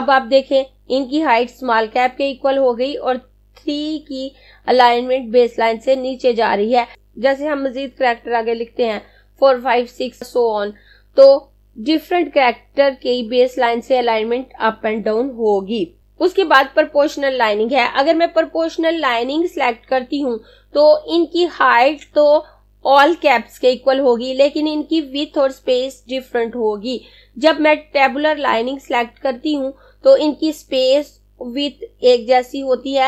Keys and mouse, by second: 16.0 click.